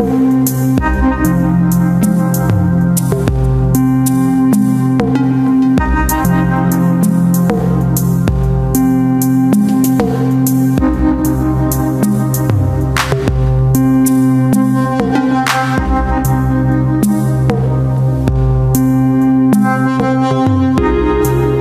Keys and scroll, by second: 7.4 space, 9.6 space, 14.3 space, 18.4 space.